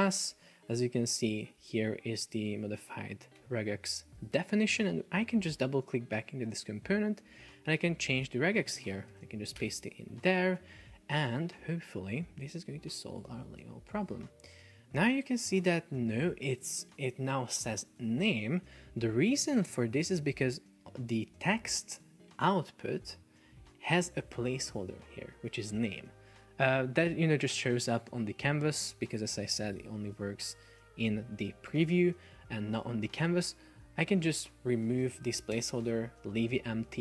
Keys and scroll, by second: 3.4 F1, 8.9 super+a, 9.2 super+v, 9.6 Return, 11.1 super+Left, 29.8 super+p, 31.7 Escape, 35.6 BackSpace, 35.8 Return.